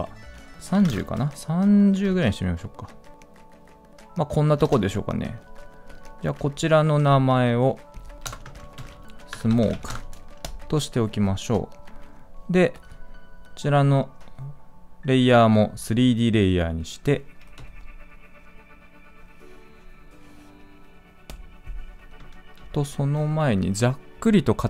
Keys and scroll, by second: 22.4 ctrl+z.